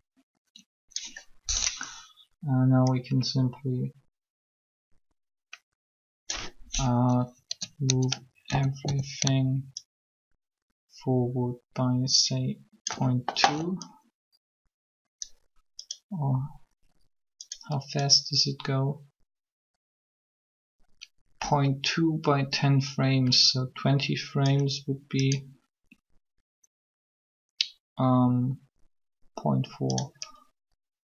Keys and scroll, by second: 7.3 Caps_Lock, 8.4-8.8 typing.